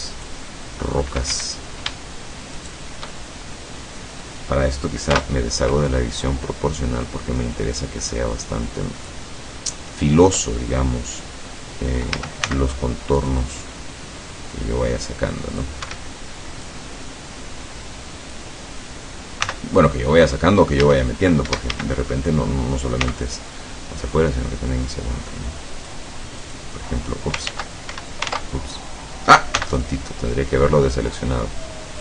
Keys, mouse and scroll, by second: 1.4 Escape, 2.6 shift+right click, 3.2-4.5 shift+middle drag, 5.2 o, 6.0-10.1 drag, 9.3 middle click, 12.2 a, 12.5 c, 13.3-15.9 drag, 15.9 Escape, 16.7-18.6 drag, 19.5 c, 19.9 click, 20.9 a, 21.6 Escape, 21.7 a, 23.1 c, 24.1-26.2 drag, 26.5 click, 27.5 ctrl+z, 27.9 ctrl+Escape, 28.4 ctrl+z, 29.6 c, 29.8-32.0 drag.